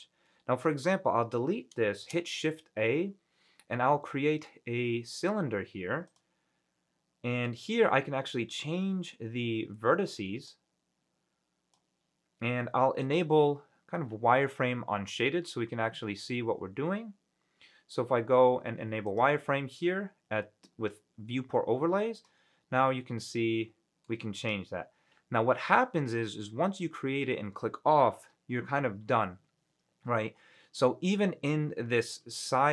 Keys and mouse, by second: 0.9 Delete, 2.2 shift+a, 10.7-12.0 drag, 13.2-22.2 drag, 22.3 click, 22.9-24.2 middle drag.